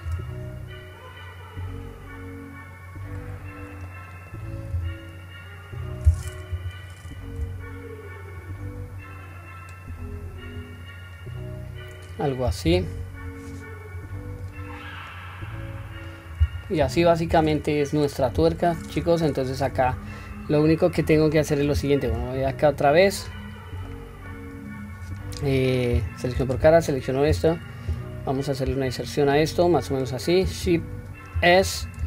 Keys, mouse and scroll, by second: 3.9 middle click, 4.7 s, 6.5 KP_1, 8.4-10.6 drag, 11.2 scroll down 1, 12.7 Tab, 14.5 click, 15.1-16.1 middle drag, 16.3-16.7 scroll down 1, 16.7-18.0 middle drag, 18.4 KP_1, 19.9-20.2 scroll down 1, 20.2 scroll up 1, 20.9 middle click, 20.9-21.2 scroll up 1, 22.1 Tab, 22.7 middle click, 23.3-23.9 scroll up 1, 23.9 middle click, 23.9-24.3 scroll up 1, 26.0 3, 26.5 click, 27.9 i, 31.4 shift+s.